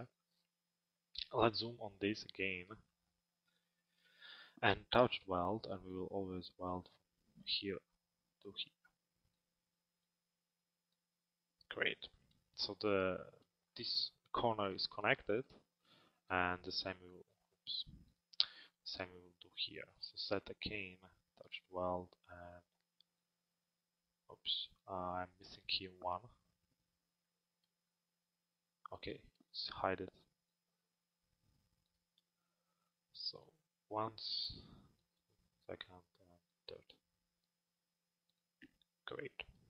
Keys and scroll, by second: 1.0 z, 19.7 z.